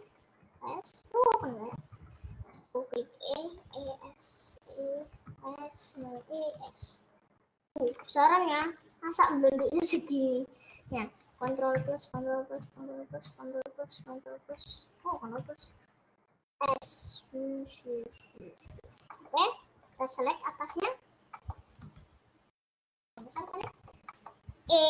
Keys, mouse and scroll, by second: 0.5 e, 1.7 ctrl+z, 2.5 s, 3.9 e, 5.4 s, 6.1 e, 6.5 s, 7.9 middle click, 8.4 scroll down 2, 8.7 middle click, 9.3 scroll up 3, 9.5-10.7 middle drag, 10.7 click, 11.7 KP_Add, 12.1 KP_Add, 12.6 KP_Add, 13.1 KP_Add, 13.9 KP_Add, 15.5 KP_Subtract, 17.0 s, 19.3 middle click, 19.9 click, 20.9 middle click, 21.9 s, 23.4-24.7 shift+middle drag, 24.7 e.